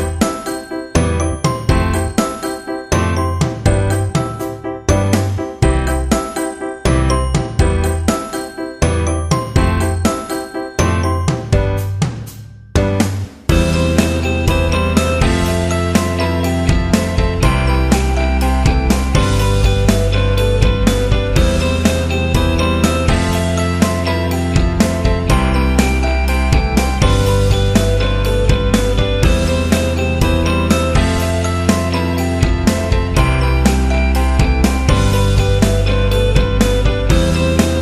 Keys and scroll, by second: 4.3 ctrl+t, 9.2 Return, 12.4 ctrl+j, 16.6 Delete, 18.7 ctrl+t, 21.9 Return, 22.7 z, 24.6 v, 27.3 z, 29.2 z, 33.8-34.5 typing, 36.9 Delete.